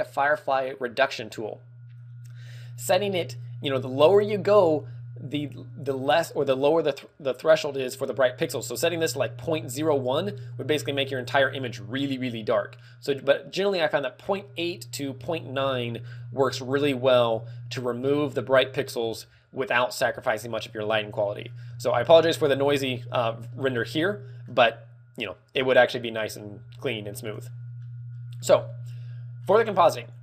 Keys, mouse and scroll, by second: 5.1 click, 6.9 middle click, 11.3 click, 11.9-12.8 scroll down 1, 12.8 scroll down 1, 17.1 click, 21.1 middle click.